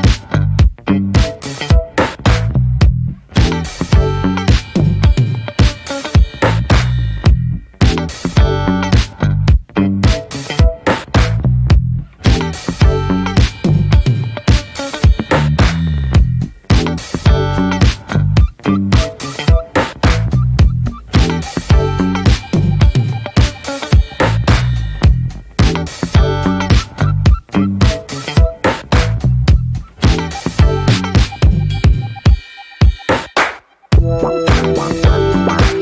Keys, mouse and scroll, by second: 1.4-2.0 middle drag, 2.0 ctrl+s, 2.2 click, 2.9 Tab, 3.7 scroll down 1, 4.1 a, 4.2-5.0 right drag, 5.0-5.4 scroll up 1, 5.7-6.1 middle drag, 6.1 Tab, 6.3-8.9 middle drag, 8.9 ctrl+s, 9.2-9.7 scroll down 1, 9.7 middle click, 10.0 Tab, 10.2-11.4 middle drag, 11.4 Tab, 12.2 middle click, 12.4 ctrl+s, 12.9-13.5 drag, 13.5 middle click, 13.8 Tab, 14.1-15.0 middle drag, 15.0 p, 15.3 click, 15.8 shift+middle click, 16.0-16.4 scroll up 1, 16.4 click, 17.0 /, 17.3 scroll down 2, 17.6 middle click, 17.8 Tab, 18.2-18.6 middle drag, 18.6-19.5 scroll up 5, 18.9 shift+middle click, 19.5 ctrl+r, 22.0 scroll down 2, 22.2 Tab, 22.4 click, 22.6 middle click, 22.8 scroll down 1, 23.0 shift+middle drag, 23.3 click, 23.4 ctrl+1, 23.7 ctrl+2, 24.0-27.4 middle drag, 27.4 drag, 27.6 middle click, 27.8-28.9 scroll up 3, 27.9 Tab, 28.1 middle click, 28.4 shift+middle click, 28.9 ctrl+r, 31.3-32.6 shift+middle drag, 32.6 ctrl+r, 35.3 ctrl+r.